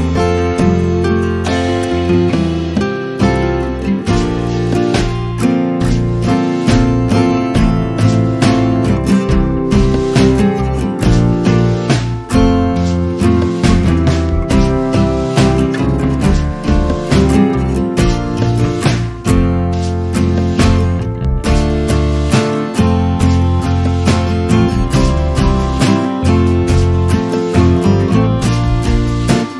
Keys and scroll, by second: 1.5 space, 3.7 space, 17.5 space, 24.3 m, 27.7 space.